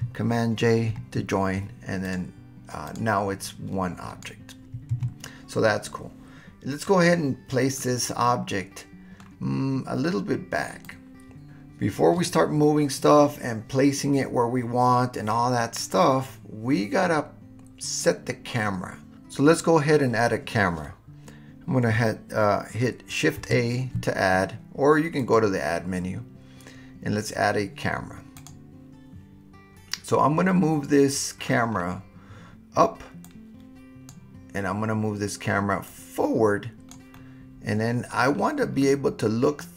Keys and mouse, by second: 0.9 super+j, 3.5 click, 4.9 super+z, 7.8-9.2 middle drag, 10.9-11.5 drag, 23.4 shift+a, 25.3-28.5 drag, 30.5-31.4 middle drag, 33.2-34.1 drag, 35.9-36.9 drag, 37.1-38.1 middle drag, 38.8-39.7 middle drag.